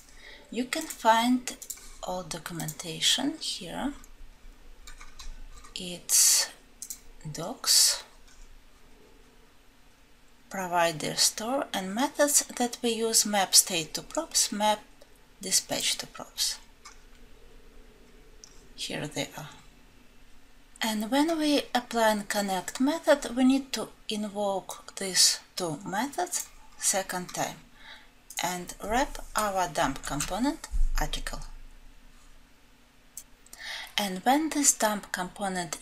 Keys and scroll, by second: 30.1 ctrl+b.